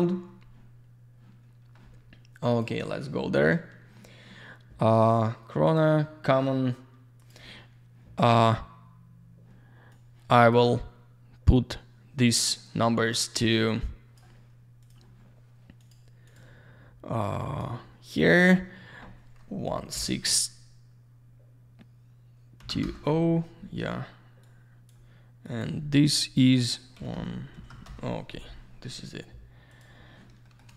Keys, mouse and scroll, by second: 2.5 click, 5.6 click, 7.2 click, 9.9 click, 13.2 click, 14.8 click, 15.8 click, 16.2 click, 17.4 click, 22.6 2, 22.8 Return, 24.4 click, 25.4 click, 26.9-28.2 typing, 29.7 click, 30.4 middle click.